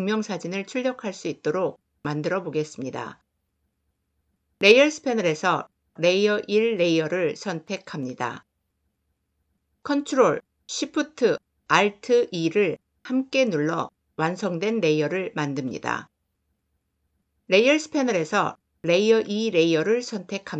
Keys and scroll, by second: 9.8 ctrl+alt+shift+e.